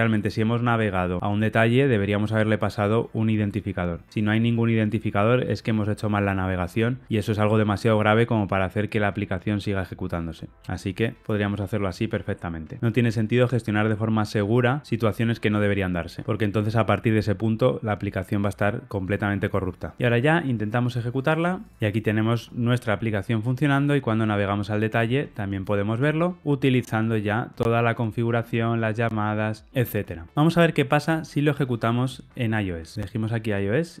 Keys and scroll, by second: 21.6 ctrl+r, 21.6 shift+F10.